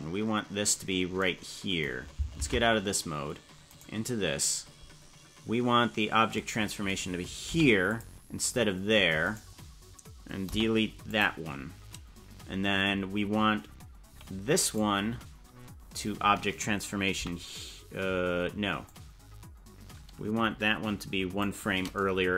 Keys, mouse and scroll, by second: 2.5 ctrl+Tab, 3.9 right click, 7.5 i, 9.5 right click, 10.5 Delete, 14.9 right click, 17.3 i, 18.9-21.5 drag.